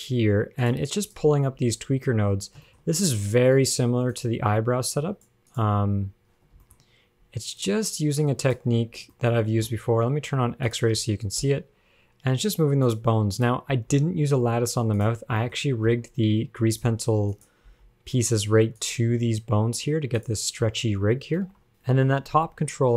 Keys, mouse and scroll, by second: 1.3 click, 1.8 g, 2.8 shift+middle click, 3.1 scroll up 1, 4.4 shift+click, 5.8 shift+click, 6.9 shift+middle click, 7.0 scroll up 1, 7.9 shift+click, 9.0 scroll up 2, 9.4 shift+middle click, 11.0 click, 11.6 g, 13.6 click, 15.3 g, 15.7 shift+middle click, 16.2 g, 17.6 click, 19.1 g, 19.4 g, 21.0 a, 21.7 alt+r, 21.7 alt+g, 21.7 click, 22.8 g.